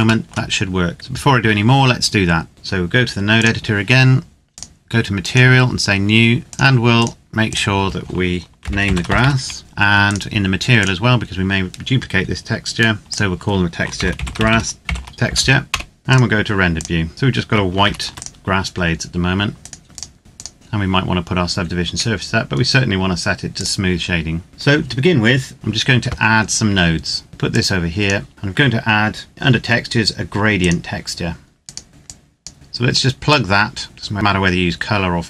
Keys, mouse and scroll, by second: 0.1 shift+middle click, 2.4 click, 8.3-9.3 typing, 9.6 Return, 9.8 click, 13.0 click, 13.7-15.0 typing, 15.4 Return, 16.0 click, 17.5 ctrl+s, 17.8 click, 19.5 right click, 19.8 click, 22.5 scroll down 1, 23.6 click, 24.5 middle click, 25.5 click, 26.5 scroll down 1, 27.3 click, 30.5 click, 31.9 scroll up 1, 32.0 click, 32.5-33.3 scroll up 1, 33.3 click.